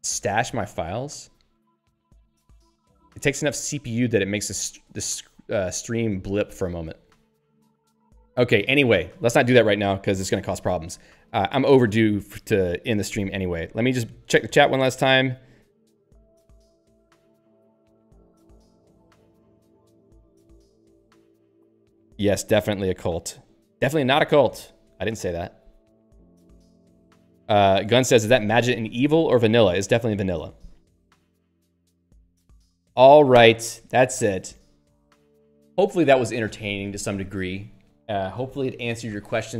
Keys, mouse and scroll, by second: 0.0-0.7 typing, 6.1 Return, 7.9 scroll down 1, 9.0 click, 9.1 click.